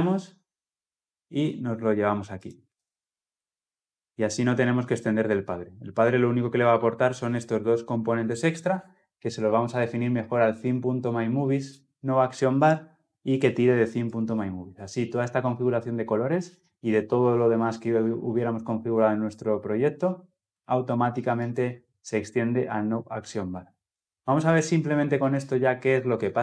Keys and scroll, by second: 2.5 ctrl+v.